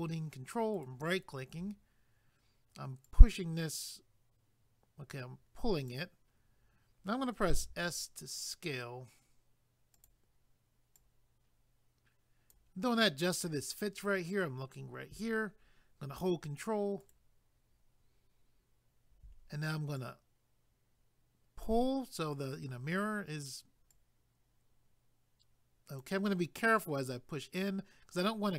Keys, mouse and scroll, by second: 0.7 ctrl+right click, 3.1 click, 9.9 click, 10.9 click, 17.0 ctrl+right click, 20.0 click, 23.9 click.